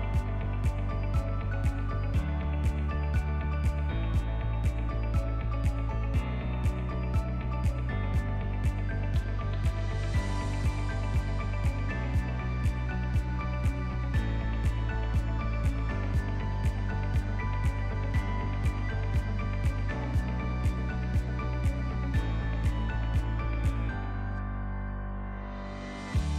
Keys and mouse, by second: 4.2 middle click, 11.6 ctrl+s, 12.8 click, 13.6 click, 15.6 click, 21.8-26.3 drag.